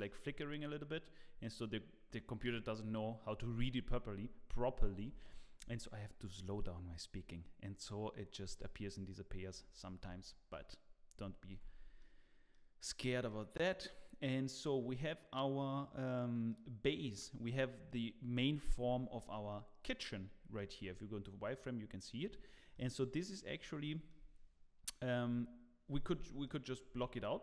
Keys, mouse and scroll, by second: 0.7-1.2 scroll down 2, 1.2-1.6 scroll up 1, 1.6-3.1 scroll down 1, 8.8-9.5 scroll up 3, 9.5 scroll down 1, 9.8 scroll up 1, 10.2 scroll down 1, 10.4 shift+middle click, 11.5 Tab, 11.5 scroll up 1, 11.8 middle click, 11.8 scroll down 1, 12.0 middle click, 13.5 middle click, 18.8 KP_7, 20.8 z, 22.7 middle click, 22.7 z, 23.9 scroll up 2, 25.2 KP_1, 26.5 middle click, 26.9 Tab, 27.1-27.4 scroll down 1.